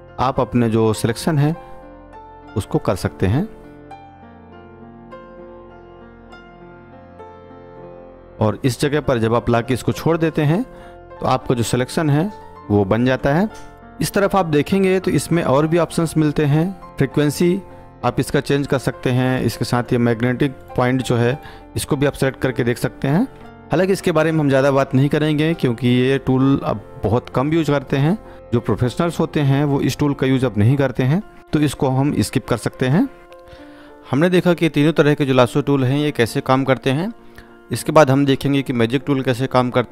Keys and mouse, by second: 33.2 click, 38.1 click.